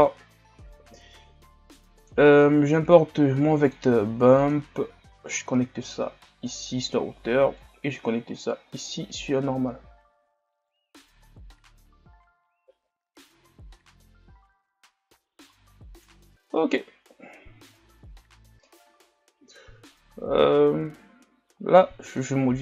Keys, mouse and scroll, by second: 5.3 click, 7.6-9.0 drag, 14.0-22.4 middle drag, 22.4 click.